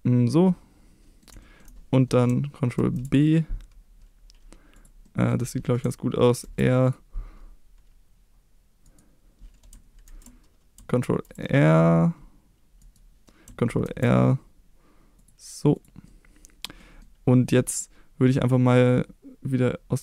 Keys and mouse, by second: 0.3 middle click, 1.4 shift+middle click, 2.8 ctrl+b, 4.8 click, 5.1 middle click, 6.4 ctrl+r, 8.9 right click, 10.1 ctrl+z, 11.0 ctrl+r, 13.9 ctrl+r, 15.8 click, 16.1 middle click, 16.8 middle click.